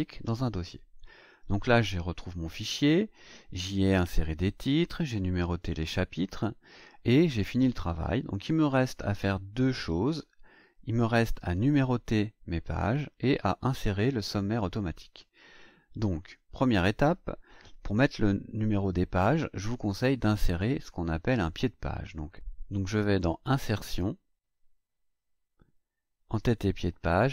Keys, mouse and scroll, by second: 7.1-7.4 scroll down 2, 7.6-9.4 scroll down 7, 10.0-10.3 scroll down 2, 10.6-10.9 scroll up 2, 23.1 click.